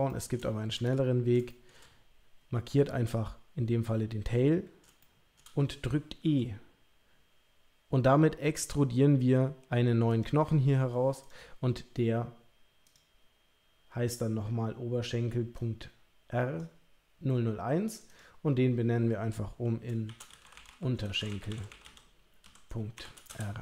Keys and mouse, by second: 0.1 shift+click, 1.5 shift+click, 5.0 shift+click, 6.2 e, 11.2 click, 12.8 click, 15.5-16.6 drag, 17.9 click, 18.1-23.6 drag.